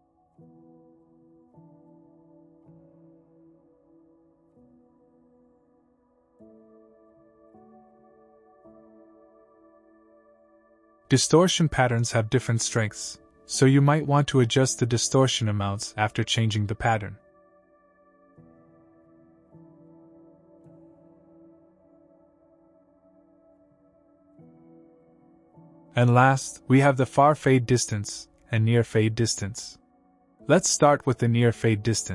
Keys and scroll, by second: 4.1 KP_0, 4.6 Return, 7.1 KP_5, 7.4 Return, 9.8 KP_3, 10.1 Return, 13.7 5, 13.9 Return, 17.6 5, 18.0 Return, 21.5 KP_1, 21.8 KP_0, 22.2 Return.